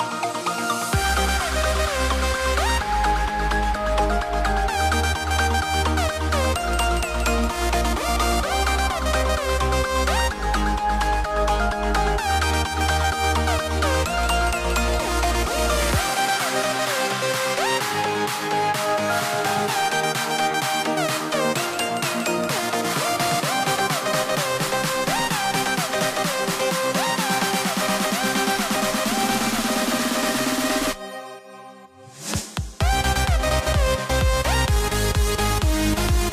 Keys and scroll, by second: 0.3 super+z, 0.4 super+z, 5.4 super+z, 15.7 super+z, 21.1 v, 23.6 x, 26.8 Caps_Lock, 27.2 a, 28.7 a, 31.0 a, 35.6 a.